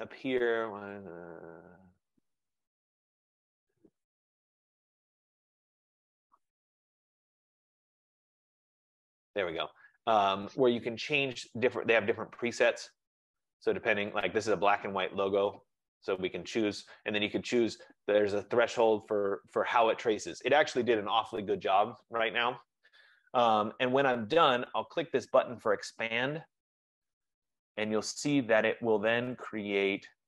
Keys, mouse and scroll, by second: 1.1 click, 8.7 click, 11.7 click, 14.4 click, 26.9 click, 29.6 click.